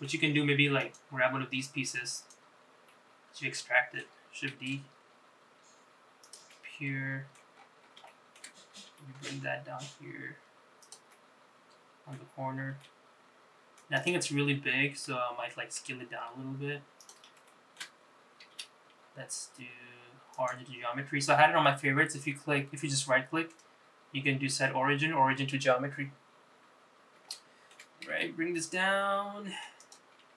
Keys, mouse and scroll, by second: 0.9 click, 2.2 click, 3.0-4.1 middle drag, 4.7 shift+d, 6.6 middle click, 7.7-8.0 scroll up 3, 8.2 shift+middle click, 9.0 g, 11.2-12.3 middle drag, 12.8 g, 14.4 middle click, 15.9 s, 17.6 shift+middle click, 18.7 q, 23.6-26.2 right drag, 27.1 scroll down 1, 27.4 shift+middle click, 28.2 g.